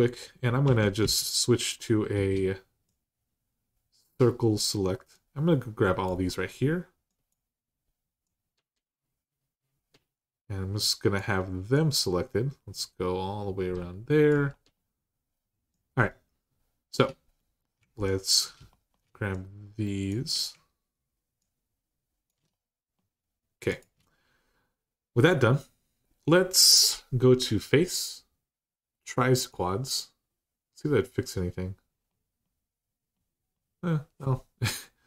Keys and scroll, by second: 0.4-0.8 typing.